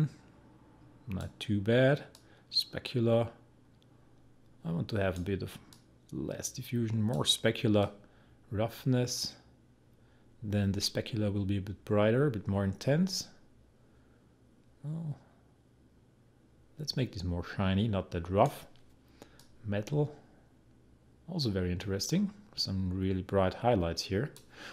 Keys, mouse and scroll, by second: 19.4-24.7 drag.